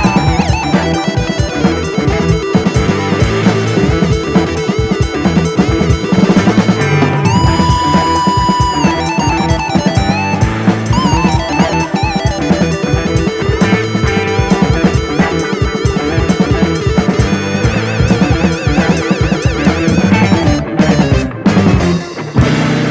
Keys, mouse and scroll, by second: 0.6 click, 0.9 scroll down 1, 1.1-2.0 middle drag, 2.0-2.6 drag, 3.3 click, 3.9 scroll down 1, 4.0 alt+space, 4.3-4.7 middle drag, 4.7 click, 4.9 Tab, 5.5 click, 6.2 middle click, 7.0 ctrl+r, 8.7 click, 9.7 click, 10.1 i, 10.9 i, 11.4 scroll down 1, 11.7 middle click, 12.1 scroll up 2, 12.2 middle click, 12.5 KP_3, 12.7-13.1 scroll up 1, 13.1 ctrl+r, 14.6 ctrl+r, 15.5 ctrl+r, 17.4 ctrl+r, 18.5 ctrl+r, 20.3 middle click, 20.8 ctrl+r, 21.9 scroll down 4, 22.1 middle click, 22.8-22.9 scroll up 3.